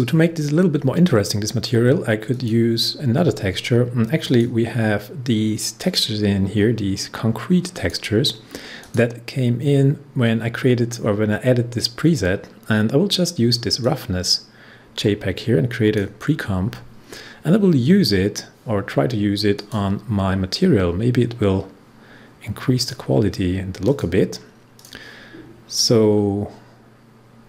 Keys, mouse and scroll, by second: 2.2 click, 13.7-18.3 drag, 19.5 click, 22.7 click.